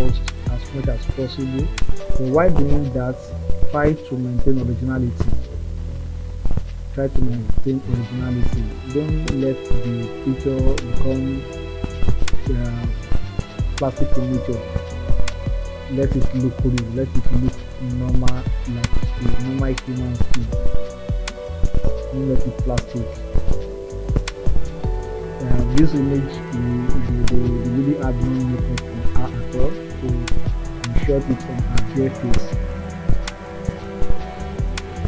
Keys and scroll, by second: 7.0 ctrl+z.